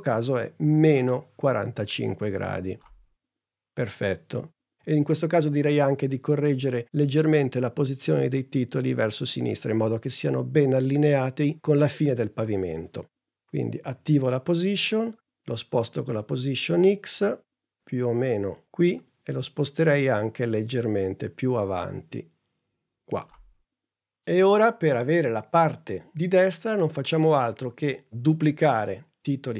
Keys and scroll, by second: 14.0 p.